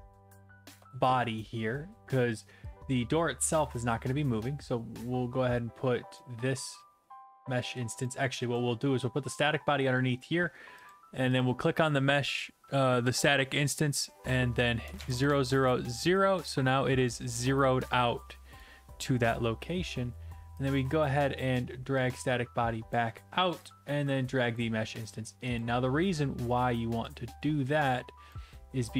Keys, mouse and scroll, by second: 0.0-0.4 typing, 0.8 Return, 3.7 click, 8.0 click, 8.6 click, 10.2 click, 10.9 click, 11.4 click, 13.3 click, 14.1 click, 14.9 typing, 15.0 Tab, 15.3 Tab, 16.0 Return, 17.8-18.6 typing, 18.6 right click, 21.5 click, 22.9 click, 25.6 click, 28.3 click.